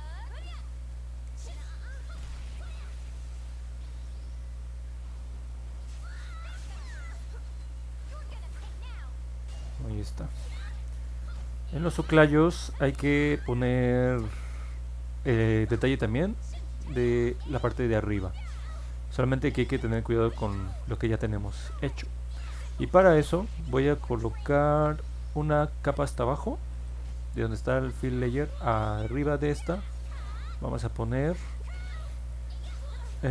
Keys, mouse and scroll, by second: 1.7 click, 2.2 click, 2.7 click, 3.3 click, 3.9 click, 4.4 click, 4.9 click, 5.3 click, 5.8 click, 6.2 click, 6.8 click, 7.4 click, 7.8 click, 10.5 middle click, 10.6-11.0 scroll down 3, 11.3 scroll up 2, 12.5-13.6 alt+middle drag, 25.0-25.3 scroll down 1, 26.7 click, 29.6 click, 31.4 click, 31.6 click.